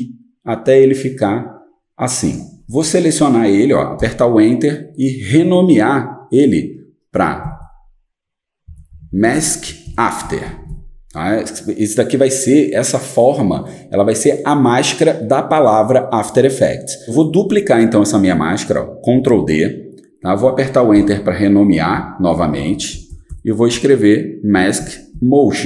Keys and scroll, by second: 4.0 Return, 7.4-11.2 typing, 19.1 ctrl+d, 21.0 Return, 21.9 Right, 22.3-25.6 typing.